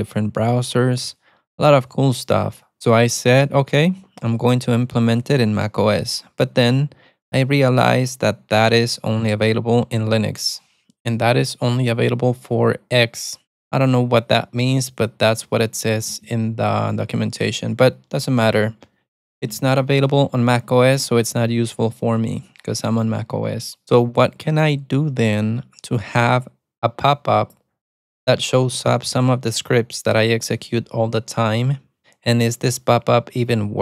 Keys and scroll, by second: 0.5 ctrl+j, 0.6 ctrl+j, 1.1 ctrl+k, 1.2 ctrl+k, 1.4 ctrl+j, 2.2 alt+super+w, 2.4 alt+super+w, 4.2 shift+super+[, 7.2 alt+super+a, 9.3 alt+super+a, 9.4 alt+super+t, 9.9 alt+super+a, 10.0 alt+super+c, 11.9 alt+super+a, 13.1-16.3 typing, 16.5 ctrl+r, 17.3-18.6 typing, 18.6 Return, 19.2 Return, 22.8 ctrl+c, 23.8-25.6 typing, 26.1 alt+super+a, 27.8 alt+super+a, 28.3 alt+super+a.